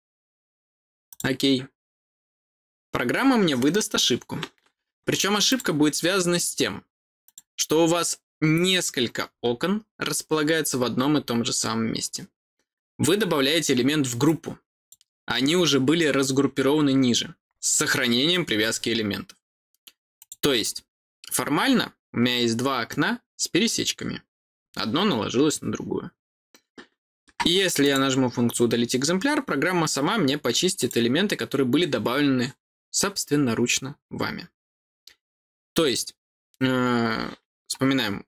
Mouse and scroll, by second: 1.0 click, 5.4 click, 7.2 click, 14.2 click, 20.1 click, 27.8 click, 30.7 click.